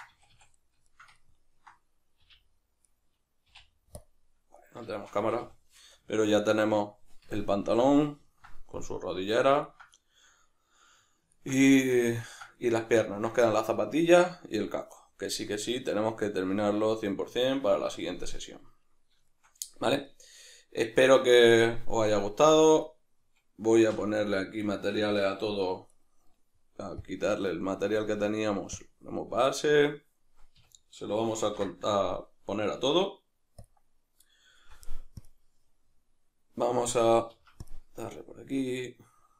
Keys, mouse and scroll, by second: 0.1 a, 0.9 shift+middle click, 1.2 ctrl+middle click, 2.2 `, 2.9 middle click, 3.5 `, 4.6-22.8 middle drag, 5.2 a, 22.8 right click, 24.0 a, 25.0-26.0 shift+middle drag, 26.0 right drag, 27.0 drag, 28.0-39.3 drag, 30.6 a, 31.4 ctrl+l, 37.5 Escape.